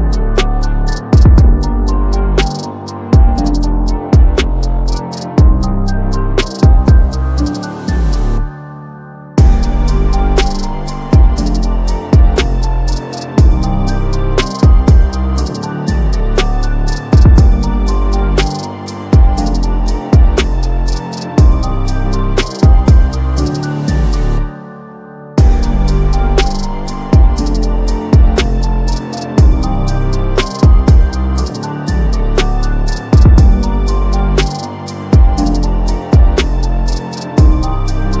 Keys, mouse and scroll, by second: 0.4-1.6 drag, 3.5 click, 6.3-10.0 drag, 14.2 click, 18.4 click, 21.5 click, 22.1-24.3 typing, 22.9-23.2 click, 26.3 click, 26.6 typing, 27.0 click, 27.9 click, 30.0 click, 31.2 7, 31.6 click, 34.0 click, 34.7 click, 36.0 5, 36.3 click, 37.0 click, 38.0 click.